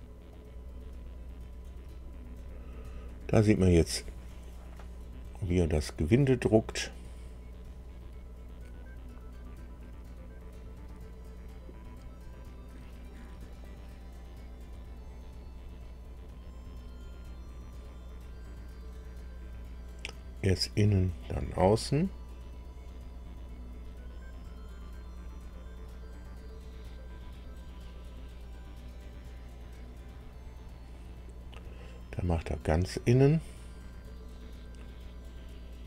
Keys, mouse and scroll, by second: 0.3 click.